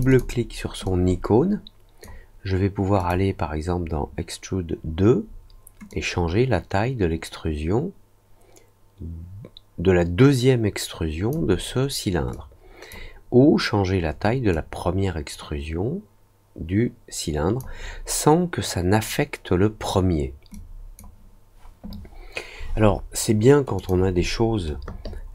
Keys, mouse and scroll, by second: 0.0 click, 0.8-2.0 drag, 2.9 click, 5.8-11.2 drag, 12.3 click, 14.5 click, 20.5 click, 23.7 click.